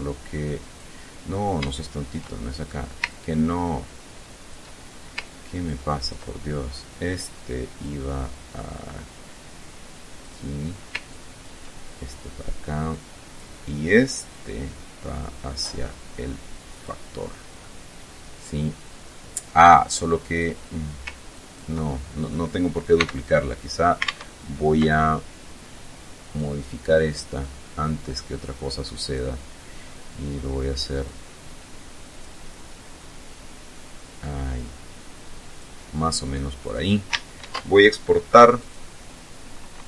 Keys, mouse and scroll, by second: 0.8 shift+click, 0.9 shift+right click, 1.2 shift+click, 2.3-3.9 ctrl+drag, 4.8 ctrl+click, 7.0-9.6 drag, 10.3 ctrl+click, 12.1-12.7 drag, 13.5-16.2 drag, 16.7-19.0 middle drag, 19.4 right click, 20.5 ctrl+click, 21.4 ctrl+click, 22.1 x, 23.3 alt+Tab, 25.5-28.5 drag, 30.2-31.6 drag, 32.2-35.0 drag, 35.8 click, 36.6 ctrl+shift+e, 37.7 click, 39.0 Delete.